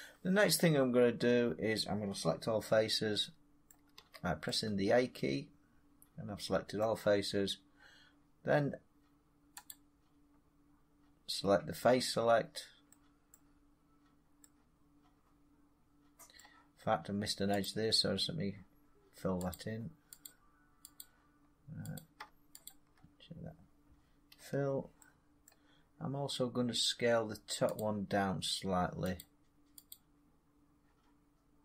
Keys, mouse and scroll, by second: 2.4 scroll up 2, 2.6 scroll down 3, 3.5 middle click, 3.8 a, 6.6 middle click, 9.5 click, 12.3-12.7 scroll, 13.2 middle click, 16.2 middle click, 17.6 click, 19.4 click, 20.1 click, 20.8 click, 21.9 click, 22.6 shift+click, 24.3 f, 25.4 middle click, 27.7 click, 29.1 click, 30.2 click.